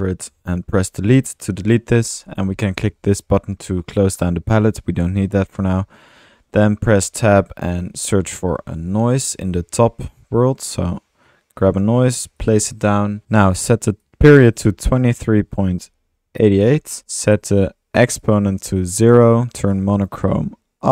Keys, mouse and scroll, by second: 1.2 Delete, 4.8 click, 5.4 click, 6.0 click, 6.2 typing, 7.8-9.1 typing, 11.7 drag, 12.1 click, 12.5 click, 13.2 ctrl+z, 18.2-19.1 drag, 20.8 click.